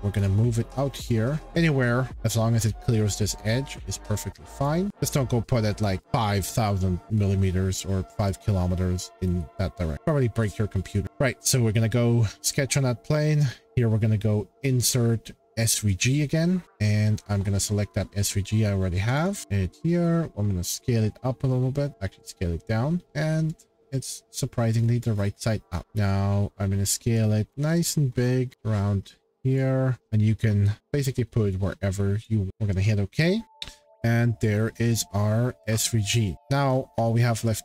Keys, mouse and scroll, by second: 0.1 click, 1.0 click, 2.1 click, 3.7 click, 4.6 click, 4.9 click, 4.9 shift+middle click, 9.2 shift+middle click, 9.9 click, 9.9 middle click, 10.8-11.2 scroll, 13.6 click, 16.0 click, 16.6 click, 19.2 click, 19.4 click, 19.4 scroll, 19.7 click, 20.0 middle click, 23.0 click, 24.3 click, 24.8 middle click, 24.8 middle click, 24.9 middle click, 25.1 middle click, 25.2 middle click, 25.4-25.8 scroll, 27.1 click, 28.5 click, 29.5 click, 32.2 click, 34.4-35.8 drag, 36.3 shift+middle click, 36.4 click, 36.6-37.3 scroll.